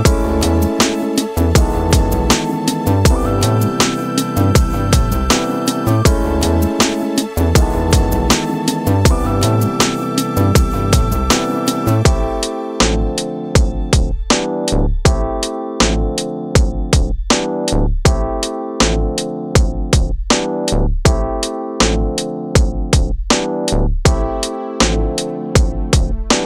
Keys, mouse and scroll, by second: 3.2 click, 4.0 scroll up 2, 4.5-8.4 shift+middle drag, 8.4-9.3 scroll down 1, 9.3-19.8 middle drag, 19.8-20.1 scroll up 3, 20.6-26.4 shift+middle drag.